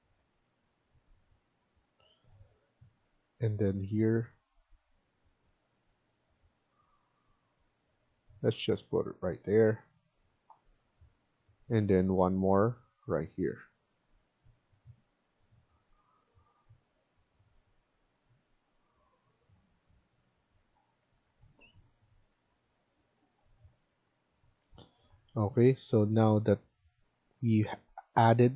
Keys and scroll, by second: 8.3 Escape, 8.6 Escape, 20.9 Escape, 21.2 Escape, 24.5 Escape.